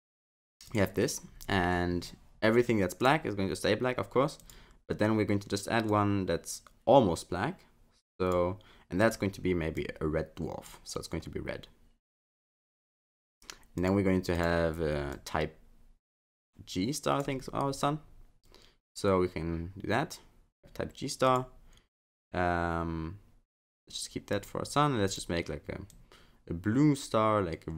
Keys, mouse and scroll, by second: 0.7 click, 3.0 click, 4.4 click, 5.9 click, 9.0 click, 13.8 click, 14.4 click, 21.3 click, 24.3 click, 25.1 click.